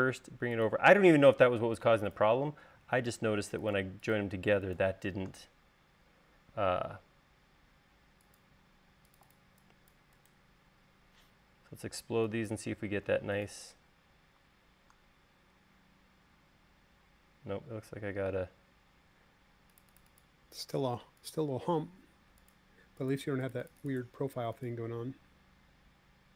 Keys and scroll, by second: 3.9 space.